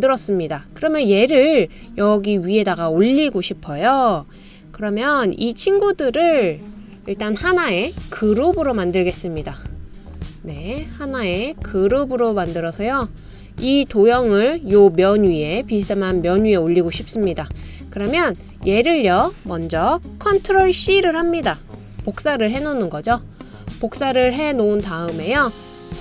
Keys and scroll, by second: 22.2 super+c.